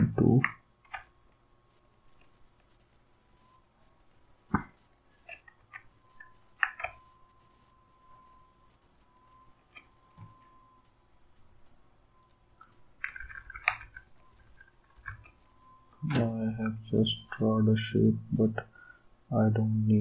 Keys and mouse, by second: 2.8 shift+click, 5.6 ctrl+z, 8.1 shift+click, 13.0 Down, 13.2 Down, 13.3 Down, 13.5 Down, 13.8 Down, 14.3 Down, 14.4 Down, 14.9 Down, 16.9 d.